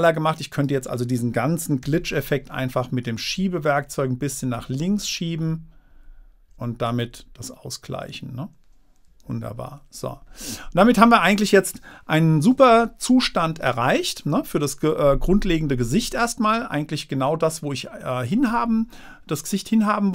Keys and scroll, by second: 4.6 Left, 7.4 Down, 9.7 super+-.